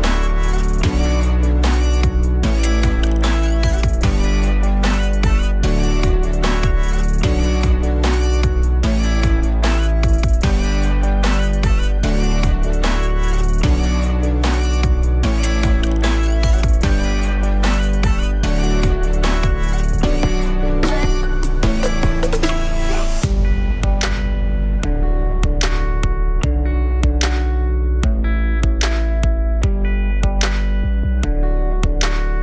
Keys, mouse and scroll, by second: 0.2 shift+a, 2.0 click, 3.4 h, 4.3 click, 4.4 h, 5.0-5.5 alt+middle drag, 5.5 scroll up 1, 5.9-7.2 alt+drag, 7.2 Tab, 7.8 click, 8.0 Tab, 8.9 ctrl+r, 10.8-12.3 alt+drag, 13.9-16.4 alt+drag, 16.9 click, 17.4-20.3 drag, 20.3 KP_3, 22.1-22.4 scroll down 1, 22.4 alt+middle click, 22.9-23.2 scroll up 1, 23.2 1, 23.5 click, 29.9 click, 32.0 KP_1.